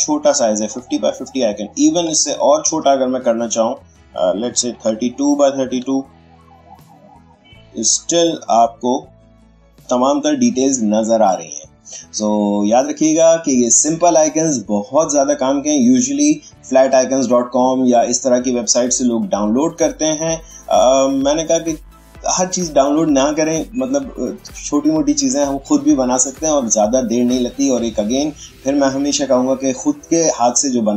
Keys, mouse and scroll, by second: 1.9-3.5 drag, 2.2 alt+shift+h, 4.6-5.0 typing, 6.9 click.